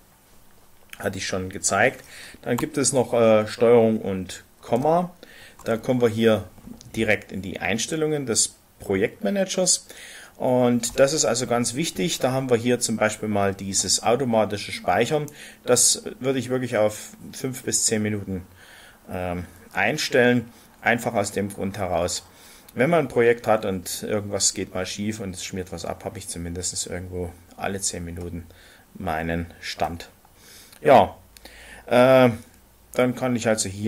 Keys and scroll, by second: 4.7 ctrl+,.